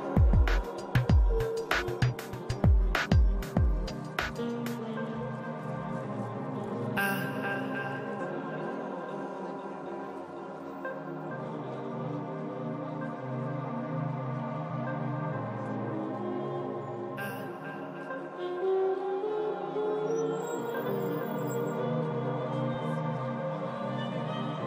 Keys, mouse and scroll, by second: 3.3-5.1 middle drag, 3.9 f, 4.4 shift+c, 4.6 f, 5.1-11.2 drag, 5.9 middle click, 6.8 middle click, 7.5 middle click, 8.7-9.8 middle drag, 11.0-12.1 middle drag, 11.5-12.7 drag, 12.2 middle click, 12.5 i, 12.7 f, 12.9-19.5 drag, 13.6 f, 14.2 middle click, 15.3 middle click, 16.3 middle click, 16.5 f, 17.5-18.9 middle drag, 18.9 shift+z, 19.5 ctrl+z, 20.1-21.9 middle drag, 20.1 shift+z, 20.7-23.5 drag, 21.0 f, 22.8 middle click, 23.5 middle click, 23.6 click, 24.4 middle click, 24.4 f, 24.5-24.6 drag.